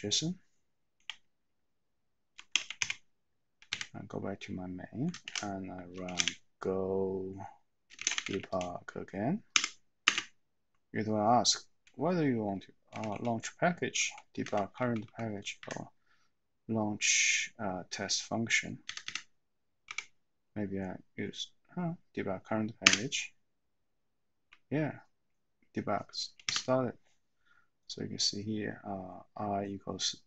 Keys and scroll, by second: 2.8-3.7 typing, 5.1-6.7 typing, 7.9-9.0 typing, 9.5 Tab, 10.0 Return, 13.0 Down, 13.1 Down, 14.0 Down, 14.4 Up, 14.7 Down, 15.0 Down, 15.6 Up, 19.0 Up, 19.0 Up, 19.9 Down, 26.6 n.